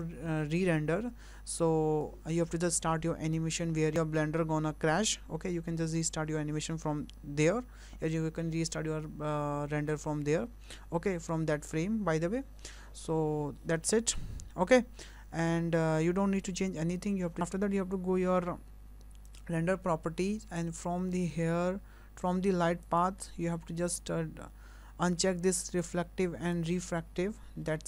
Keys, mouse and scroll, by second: 15.1-16.5 scroll down 9, 19.3 click, 22.1 click, 22.1-22.8 scroll down 3, 22.9 click, 23.3-25.7 scroll down 5, 25.7 click, 26.6 click, 27.6-27.8 scroll up 5.